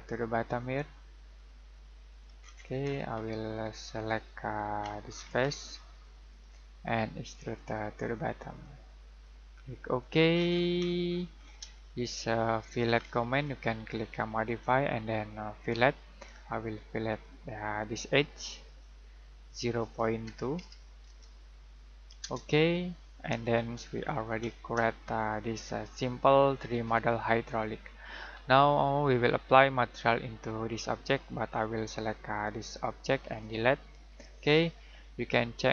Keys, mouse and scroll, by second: 2.3 scroll down 1, 2.5-3.7 scroll up 1, 4.0 middle click, 4.7-5.5 scroll down 1, 6.3 click, 10.3 scroll down 1, 10.4-11.5 scroll up 1, 11.8 middle click, 12.9-13.4 scroll down 1, 13.4-14.4 scroll up 1, 14.4 click, 20.2-21.5 typing, 22.2 Return, 23.4 scroll down 1, 23.7-24.8 scroll up 1, 25.1 middle click, 27.3 middle click, 28.3-30.3 scroll down 1, 30.3-31.5 scroll up 1, 31.5 click, 33.9 Delete.